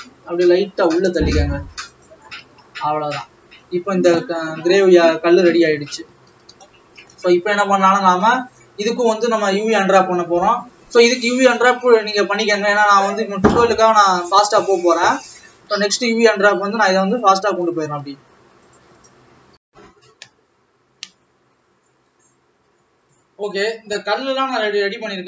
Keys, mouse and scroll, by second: 2.6 alt+a, 2.8-3.3 scroll down 4, 3.3 middle click, 4.2 scroll up 3, 4.5 middle click, 5.4-6.4 scroll down 3, 9.5-12.0 shift+middle drag, 12.0-15.3 drag, 15.3-15.8 scroll up 3, 15.8-17.7 middle drag, 17.7-18.8 drag.